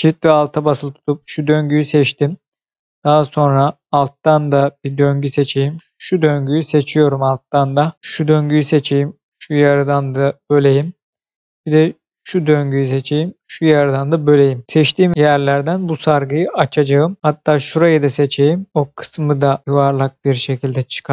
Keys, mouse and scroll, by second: 0.7 alt+shift+click, 1.7 middle click, 3.6-4.2 scroll up 1, 4.2 middle click, 5.9 alt+shift+click, 8.4 alt+shift+click, 9.4 middle click, 12.1 alt+shift+click, 12.8 alt+shift+middle click, 14.0 middle click, 17.2-17.6 scroll up 1, 17.6 alt+shift+click, 18.7 middle click, 19.7 scroll down 1, 20.2 middle click.